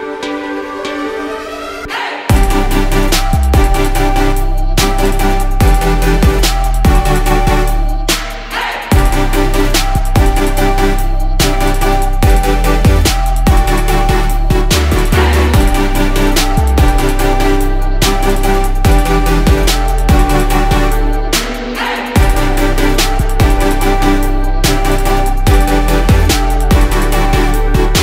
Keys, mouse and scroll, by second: 0.7 click, 2.9-3.8 ctrl+z, 7.1 click, 7.7-8.2 scroll down 1, 8.2-14.6 drag, 14.6 ctrl+z, 17.0 ctrl+z, 18.7-21.5 drag, 22.9 click, 24.6 ctrl+click, 25.2 click, 26.2 ctrl+click, 26.7 click, 27.9 click.